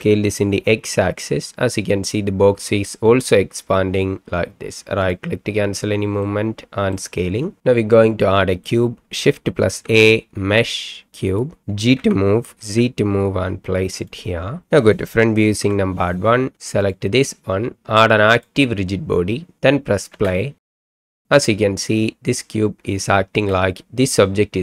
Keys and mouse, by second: 0.0 s, 0.5 x, 6.4-6.9 middle drag, 7.9-8.6 middle drag, 9.8 shift+a, 12.0 g, 12.6 z, 14.1 click, 15.6 KP_1, 18.4 click, 20.1 space, 23.3 space.